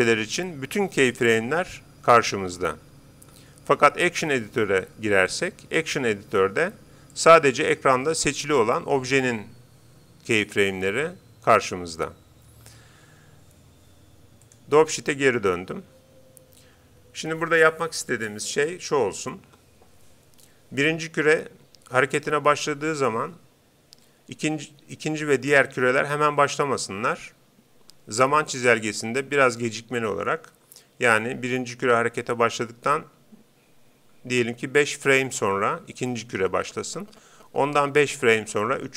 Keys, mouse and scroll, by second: 4.2-6.0 drag, 7.1-8.7 drag, 8.4-10.2 right drag, 14.4-16.1 drag.